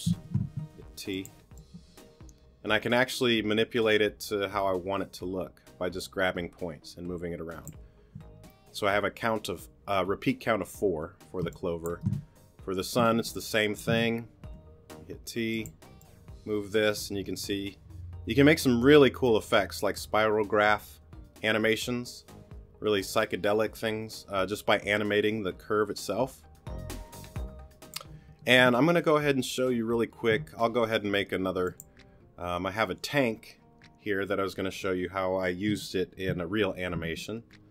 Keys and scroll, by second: 0.2 super+z, 1.3 t, 11.4 space, 13.1 space, 14.4 t.